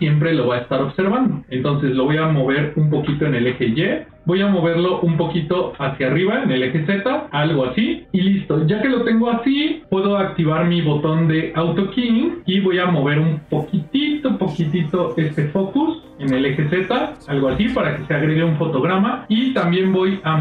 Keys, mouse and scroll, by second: 2.9 g, 3.9 click, 4.9 g, 12.2-13.2 drag, 13.8 click, 16.0 f, 16.0 z, 19.7 click.